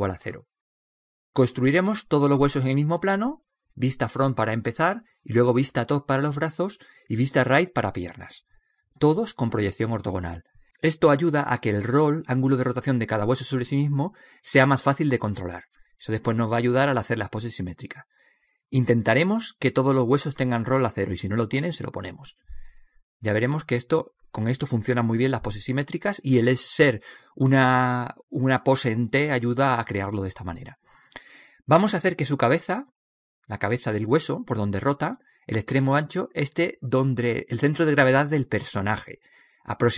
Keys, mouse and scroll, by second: 36.2 right click, 38.5 click.